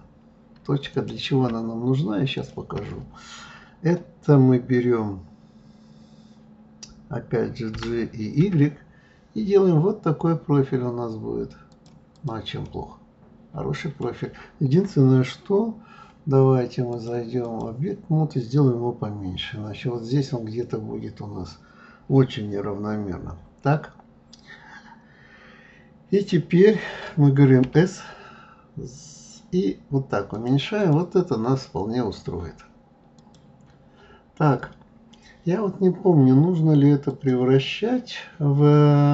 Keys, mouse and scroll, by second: 0.9 click, 2.3 shift+click, 12.1 click, 12.6-15.6 middle drag, 16.9-19.9 drag, 30.8 click, 33.1 click, 37.0 click.